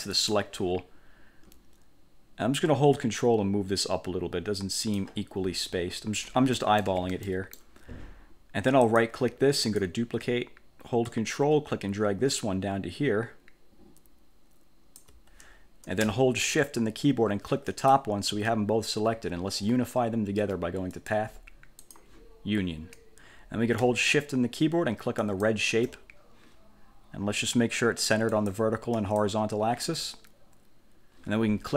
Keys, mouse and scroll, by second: 0.3 click, 3.1-5.3 ctrl+drag, 5.5-5.9 ctrl+scroll up 2, 6.7 click, 6.9 middle click, 7.0 click, 7.0 1, 7.4 middle click, 7.7 click, 9.0 click, 9.8 click, 11.2-15.3 ctrl+drag, 17.8 shift+click, 21.1 click, 21.9 click, 25.3 shift+click, 28.4 click, 29.1 click.